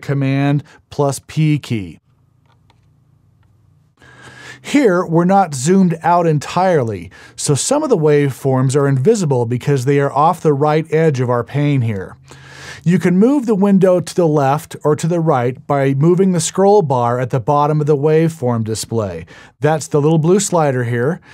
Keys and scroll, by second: 1.4 super+p, 2.1 super+p.